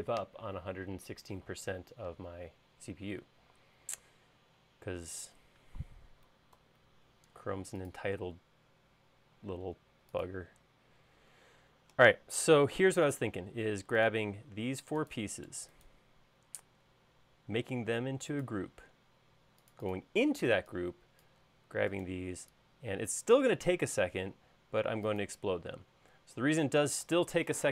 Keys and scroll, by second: 6.6 super+s.